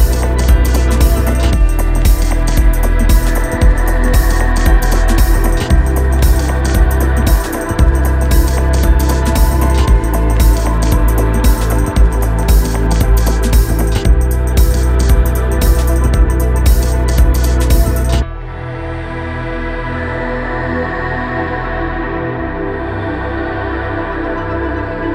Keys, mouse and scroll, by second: 1.7 1, 4.1-6.0 drag, 5.8-7.4 typing, 9.2 click, 12.5-15.3 drag, 15.3 ctrl+g, 19.1 click, 23.8 right click, 24.8 click.